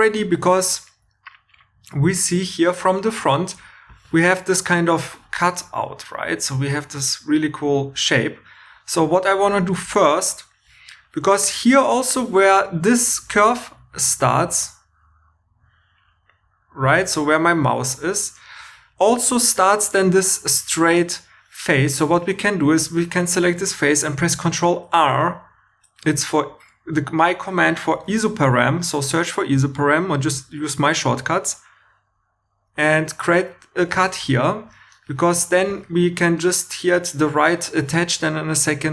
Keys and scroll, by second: 8.7 3, 13.2 2, 22.1 3, 27.9 super+r.